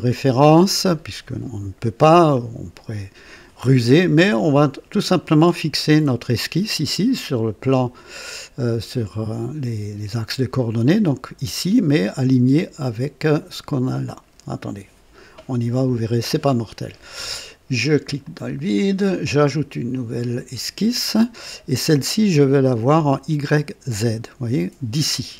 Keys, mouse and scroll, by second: 18.2 click, 19.9 click.